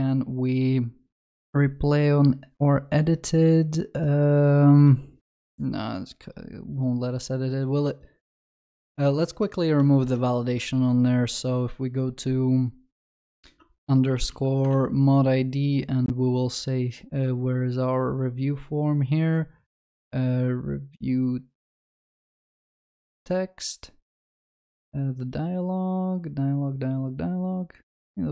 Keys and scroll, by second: 10.1 ctrl+shift+n.